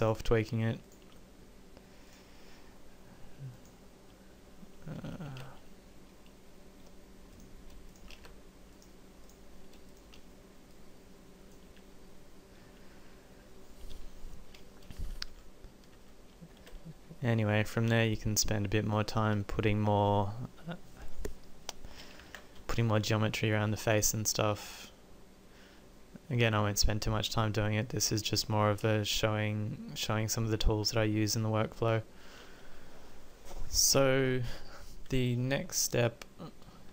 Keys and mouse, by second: 0.1-4.8 middle drag, 5.4 z, 8.3 z, 11.8 z, 16.0 Tab, 16.7 z, 22.4 ctrl+r, 24.0 click, 35.9-36.9 middle drag.